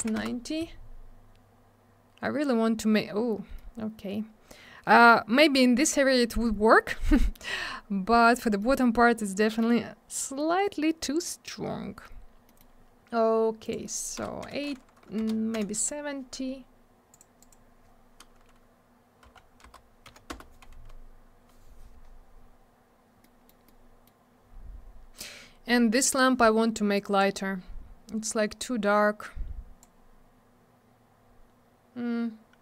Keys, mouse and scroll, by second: 0.0 9, 0.2 Return, 3.6 middle click, 6.4-6.8 scroll up 1, 7.0 scroll down 1, 8.6 middle click, 10.5-11.8 scroll up 1, 11.8-12.3 scroll down 1, 12.5 middle click, 12.6 middle click, 13.6 click, 13.7 click, 14.2 BackSpace, 14.4 8, 15.2 BackSpace, 15.6 7, 17.1 click, 17.2 click, 17.4 click, 17.5 double click, 19.2 Right, 19.6 BackSpace, 20.1 7, 20.3 Return, 22.9 scroll down 1, 23.2 middle click, 23.7 middle click, 24.4 scroll up 1, 26.9 click, 28.6 click.